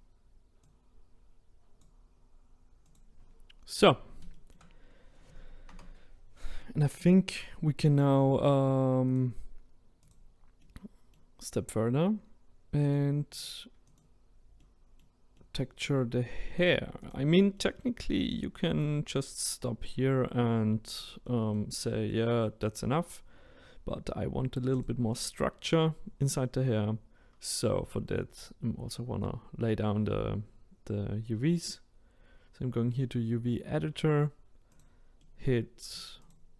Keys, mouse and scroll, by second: 0.7 click, 3.0 click, 3.3-3.8 scroll up 2, 3.8-4.3 scroll down 2, 4.3-5.7 shift+middle drag, 5.7 Tab, 6.6-12.8 middle drag, 12.8 click, 13.3 click, 14.6-16.6 middle drag, 16.6-17.1 drag, 17.5-24.7 middle drag, 24.7-26.8 drag, 26.8-27.4 scroll up 1, 27.4-27.8 scroll down 1, 27.8-34.7 middle drag, 34.7 click, 35.2-36.3 middle drag, 36.3 shift+click.